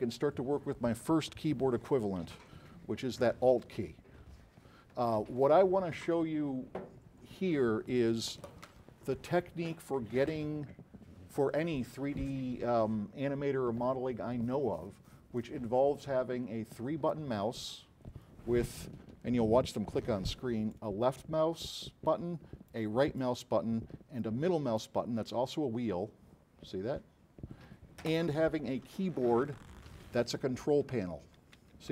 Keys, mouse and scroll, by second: 20.8 click, 20.8 right click, 22.8 right click, 24.3 middle click, 25.7 scroll up 2, 26.0 scroll down 4, 26.4-26.8 scroll up 4, 26.8 scroll down 2, 27.0 scroll up 2, 30.5-31.9 typing.